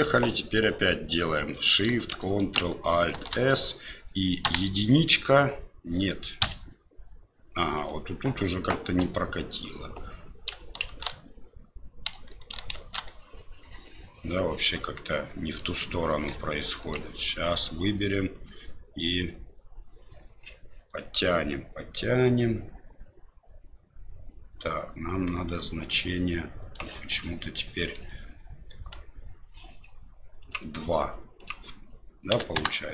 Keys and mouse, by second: 3.1 ctrl+alt+shift+s, 12.7 ctrl+alt+shift+s, 16.9 click, 19.1-26.7 drag, 30.4 click, 31.4-32.9 drag.